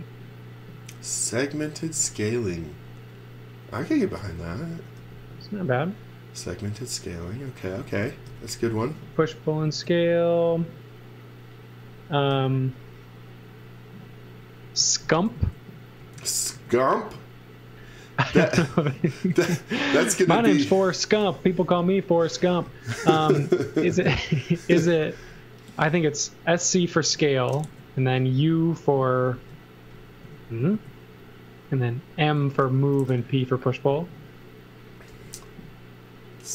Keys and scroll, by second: 3.9 x, 4.1 v, 5.0 b, 7.8-9.2 typing, 12.3 b, 14.6 space, 15.0 s, 16.0 space, 16.5 s, 22.4 x, 22.6 v, 24.8 space, 25.8 space, 27.0 s, 29.3 space, 30.2 s, 32.1-33.1 typing, 35.1 b.